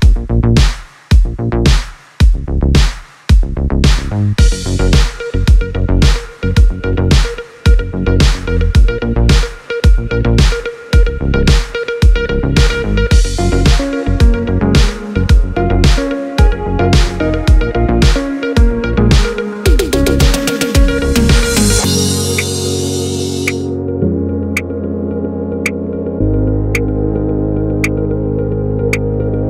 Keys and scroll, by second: 22.9 space, 27.9 space.